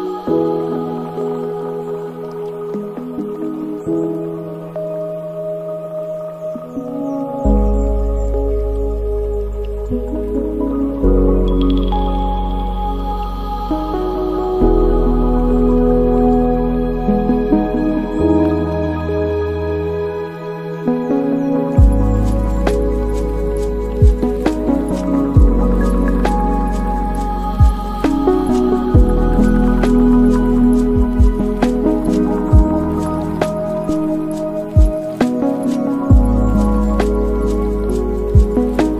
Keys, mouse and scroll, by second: 0.0 n, 0.6 g, 4.0 click, 5.0-6.9 shift+drag, 6.9 g, 9.7-12.7 drag, 13.0 g, 15.4-16.9 shift+drag, 16.9 space, 18.2 click, 18.9-21.9 ctrl+middle drag, 23.9 space, 24.2-25.4 scroll down 4, 25.4 click, 26.0 click, 27.0 r, 30.6 Tab, 31.7-32.8 drag, 33.6 e, 35.3 Tab, 36.8 click, 37.4-38.9 drag.